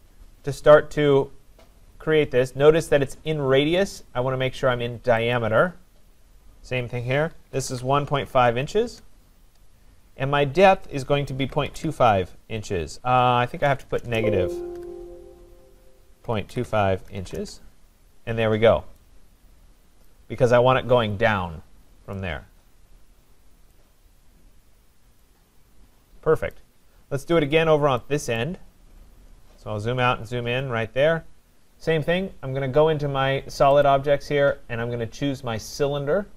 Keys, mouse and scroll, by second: 2.8 click, 5.3 click, 7.1-8.8 typing, 8.9 Return, 11.2-12.3 typing, 13.6-17.7 typing, 18.6-19.2 scroll down 2, 20.0 right click, 21.4 middle click, 23.7 right click, 24.6 middle click, 24.7 middle click, 25.1 middle click, 26.5 right click, 26.8 middle click, 26.9 middle click, 27.0-27.5 scroll, 27.5-28.0 scroll, 28.4 right click, 28.6-30.5 scroll, 33.8 click.